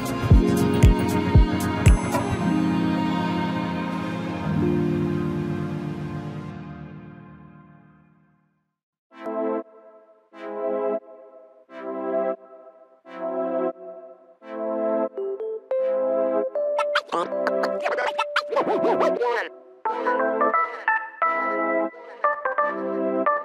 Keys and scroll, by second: 20.3 Right, 20.9 Left.